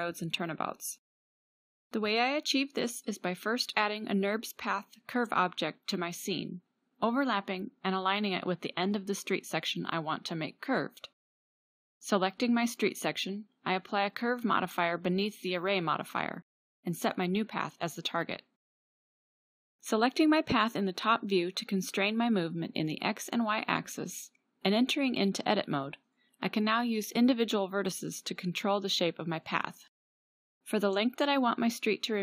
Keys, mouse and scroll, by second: 3.3 KP_Decimal, 20.1 middle click, 21.2 middle click, 26.2-28.1 drag, 28.1 Tab, 29.5 click.